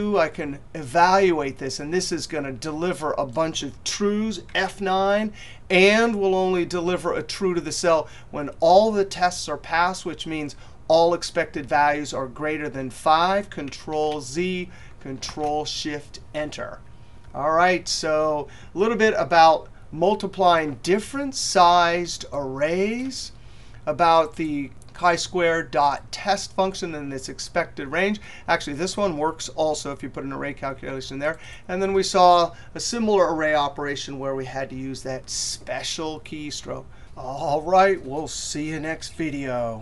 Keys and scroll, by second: 4.3 F9, 13.3 ctrl+z.